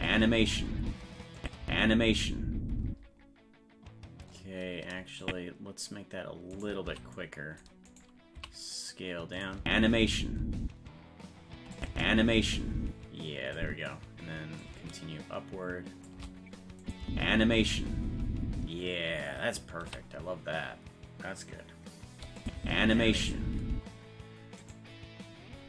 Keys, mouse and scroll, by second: 1.4 click, 1.4 space, 1.6 space, 5.2 click, 6.5 right click, 6.9 c, 8.4 s, 9.6 space, 11.7 click, 11.9 space, 13.6 click, 14.6-16.1 shift+drag, 16.8 click, 17.0 space, 19.6 ctrl+space, 20.3 ctrl+s, 22.4 click, 22.6 space, 24.8 right click, 24.8 space.